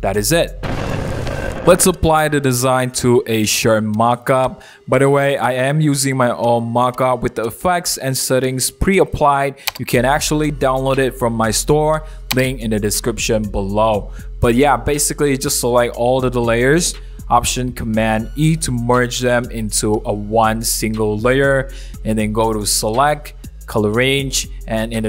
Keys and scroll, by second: 19.5 shift+b, 22.0 alt+super+e.